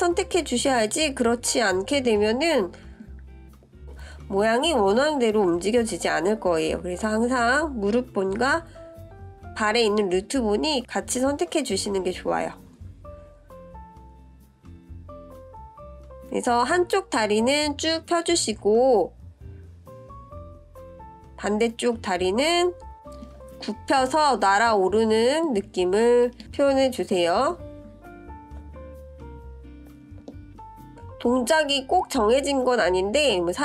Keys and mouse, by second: 0.2-0.6 middle drag, 1.4 click, 2.5 ctrl+z, 5.3-8.0 drag, 8.6 ctrl+KP_3, 11.0-16.3 drag, 17.2 click, 18.2 click, 23.0 click, 25.0 click, 26.1-27.1 drag, 28.1 click, 29.0-33.4 drag.